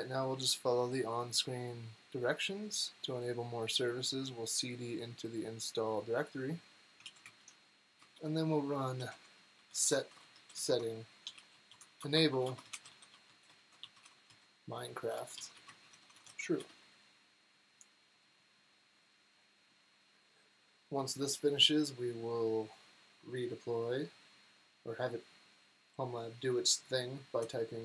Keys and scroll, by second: 6.9 super+c, 7.9 Return, 8.7-16.6 typing.